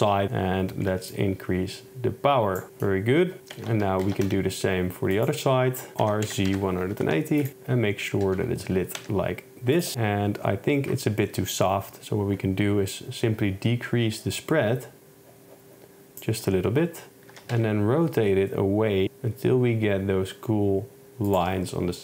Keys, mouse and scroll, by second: 2.7 shift+middle click, 3.6 shift+Tab, 4.1 shift+d, 4.3 x, 5.2 click, 6.1-7.1 typing, 8.2 g, 8.4 y, 9.0 x, 13.1-16.3 drag, 17.4 r, 17.6 z.